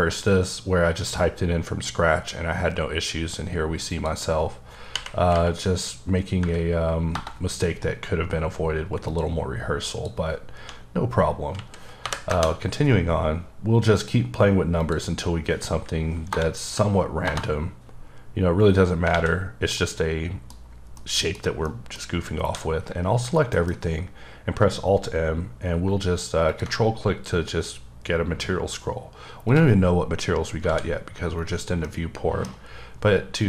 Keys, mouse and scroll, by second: 3.9 click, 4.9 Right, 5.3 Right, 6.4 Delete, 7.1 Return, 9.1 click, 9.9 click, 10.6 1, 11.5 Left, 12.0 KP_0, 12.3 KP_Enter, 14.0 click, 14.8 click, 16.3 BackSpace, 17.3 Return, 19.1 a, 19.4 scroll down 2, 19.8 middle click, 20.6 scroll up 2, 20.9 middle click, 21.6 middle click, 22.4 a, 23.5 m, 26.5 ctrl+click, 26.9-28.7 scroll up 6, 28.7 scroll up 1, 29.5 click, 30.7 alt+a, 31.8 middle click.